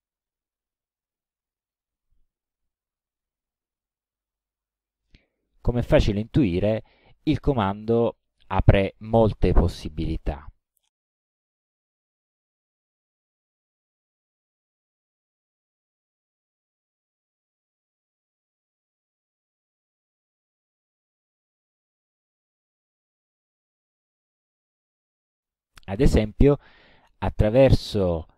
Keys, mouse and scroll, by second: 0.3-2.0 ctrl+middle drag, 11.4 click, 12.7-14.1 drag, 14.7 ctrl+scroll down 1, 15.4 ctrl+click, 22.7 click, 26.2 click, 26.9 KP_1, 27.5 click, 28.2 KP_1.